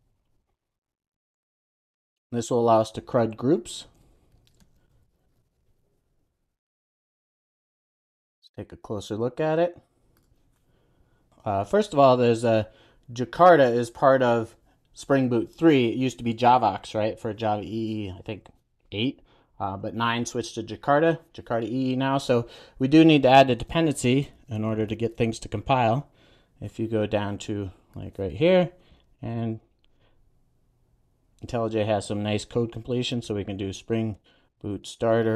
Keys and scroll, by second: 3.7 super+a, 6.9 Return, 7.4 super+s, 23.6 shift+super+o, 30.1 Return.